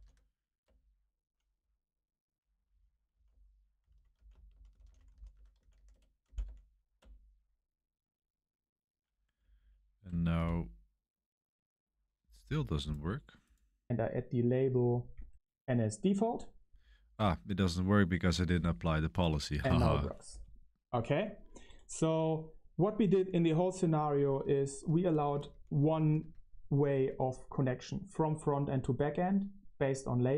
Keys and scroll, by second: 0.0-6.9 typing, 0.6 Return, 6.9 Return, 9.3 Up, 9.5 Up, 10.3 Return, 20.7-30.3 typing.